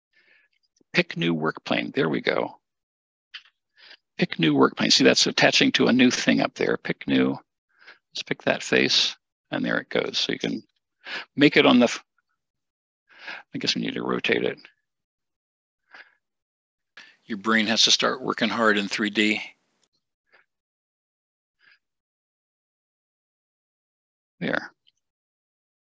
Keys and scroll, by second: 14.6-15.1 typing, 20.3 1, 24.9 typing.